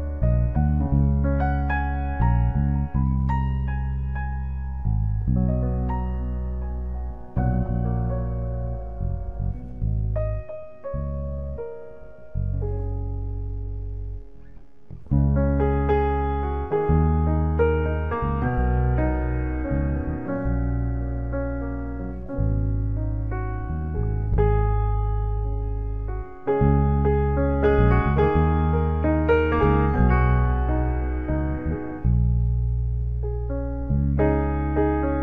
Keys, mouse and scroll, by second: 1.6 ctrl+h, 1.9 g, 2.7-4.3 drag, 5.3-7.0 drag, 7.8 shift+a, 11.3 g, 16.7 click, 17.7 click, 21.5-22.3 drag, 29.0 shift+a, 32.2 o, 34.1 shift+a.